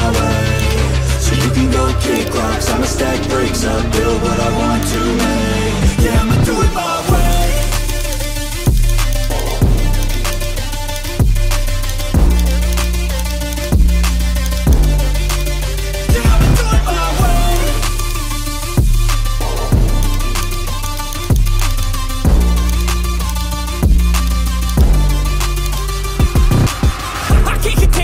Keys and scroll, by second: 6.8 x, 21.9 x.